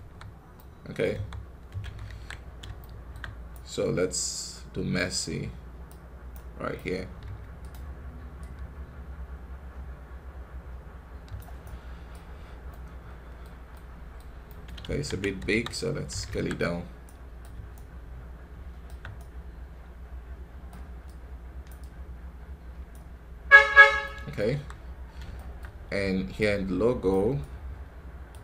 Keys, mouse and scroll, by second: 0.4 middle click, 1.0 KP_3, 1.9 ctrl+KP_1, 2.7 shift+middle click, 3.4-7.1 right drag, 7.1 f, 8.3-11.3 drag, 11.5 right click, 12.3 scroll down 2, 12.6-14.8 middle drag, 14.8 ctrl+z, 15.3 KP_3, 16.2 ctrl+KP_1, 16.9-20.9 right drag, 20.9-23.9 drag, 23.9 middle click, 24.4 KP_1, 24.8-25.6 scroll up 3, 25.2 shift+middle click, 26.3-28.4 right drag.